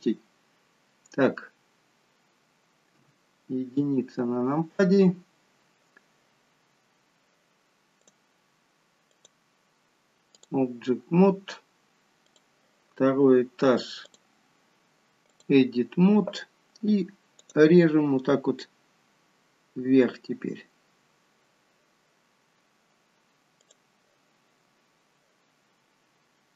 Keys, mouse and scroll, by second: 0.3-1.3 scroll down 2, 3.0 KP_1, 5.1-5.7 scroll up 1, 5.9 scroll up 2, 8.0 click, 9.2 click, 12.2 click, 14.1 click, 17.5 click, 20.5 scroll down 2, 21.0 scroll up 2, 23.6 click, 26.3 scroll down 1.